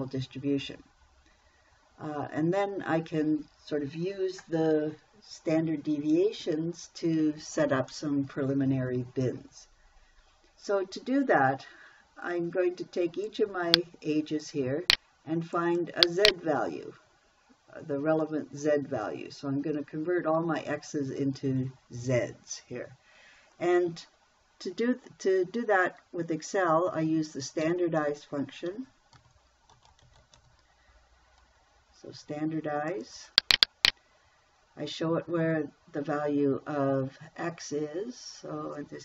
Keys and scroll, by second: 28.1 =, 29.1-30.8 typing.